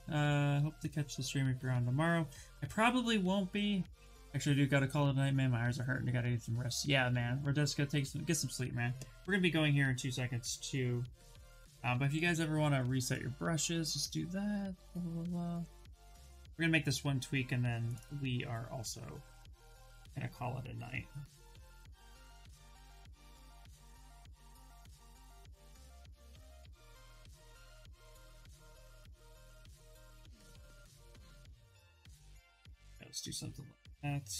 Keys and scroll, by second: 12.3 alt+Tab, 14.4 alt+Tab, 23.2 ctrl+z, 23.5 s, 30.4 ].